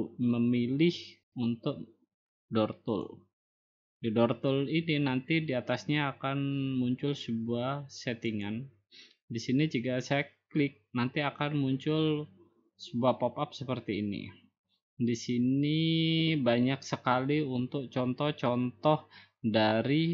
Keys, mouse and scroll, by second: 5.3 click, 9.9-11.1 scroll down 2, 12.3-13.9 scroll up 8, 13.9-14.9 scroll up 2, 14.9-15.9 scroll down 2, 15.9 scroll down 3, 16.7 scroll up 2, 18.3-19.2 scroll up 2, 19.2 scroll down 1.